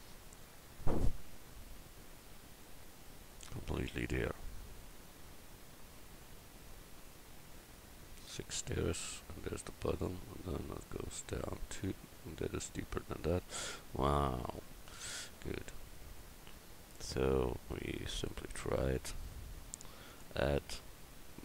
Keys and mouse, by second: 18.8 click, 20.1 click, 20.9 click.